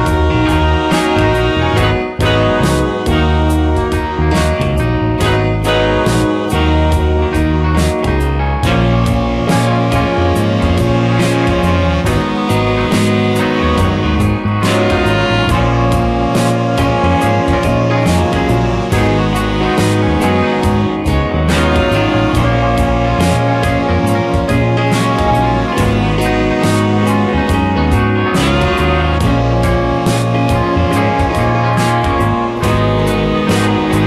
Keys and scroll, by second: 2.4 space, 13.2 space, 22.6 space, 25.5 space, 29.6 space.